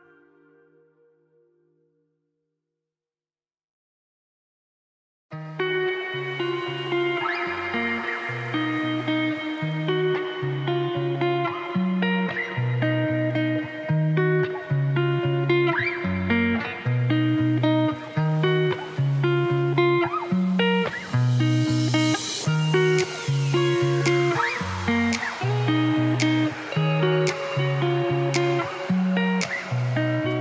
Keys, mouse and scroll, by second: 0.1 click, 0.8 ctrl+b, 4.0 click, 4.2 g, 5.0 click, 5.1 g, 6.5 click, 6.9 click, 7.1 ctrl+b, 8.8 ctrl+r, 9.6 F2, 10.4 alt+click, 11.8 alt+e, 12.8 middle click, 13.8 KP_1, 14.3 scroll up 1, 15.1 shift+middle click, 15.7 z, 16.1 alt+click, 16.4 alt+click, 17.4 ctrl+b, 19.6 Tab, 19.9 middle click, 20.1-20.6 scroll down 6, 20.2 middle click, 20.6 scroll up 8, 20.8 middle click, 20.9 Tab, 21.2 3, 21.4 alt+click, 21.5 middle click, 21.9 alt+e, 24.3 alt+click, 25.2 scroll up 1, 25.3 ctrl+b, 26.3 Tab, 26.5 scroll down 5, 27.1 middle click, 28.0 scroll up 1, 28.1 Tab, 28.7 ctrl+b.